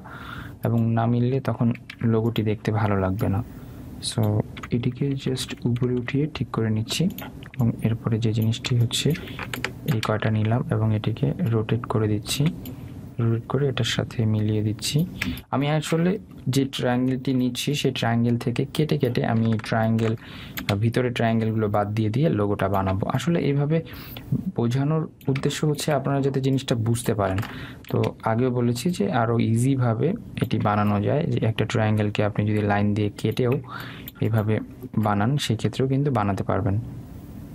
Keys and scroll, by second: 5.6 Up, 17.1 Up.